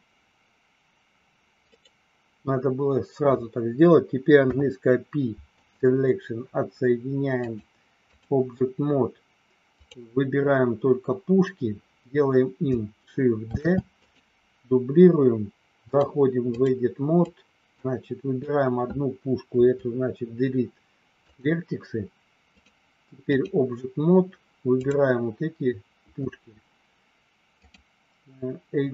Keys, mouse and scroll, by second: 1.7 right click, 4.4 p, 7.4 click, 9.7 click, 13.4 shift+d, 14.0 click, 15.8 click, 17.2-18.6 drag, 19.4 Delete, 22.6 click, 24.8 click, 27.6-28.9 drag.